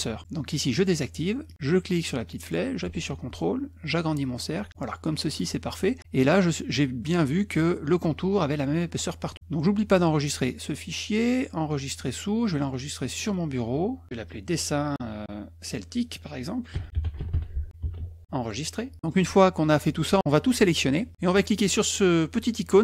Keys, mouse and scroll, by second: 5.3-5.8 drag, 5.8 scroll up 2, 13.7 click, 16.2 click, 16.8-18.1 typing, 19.4 middle click, 20.2 click.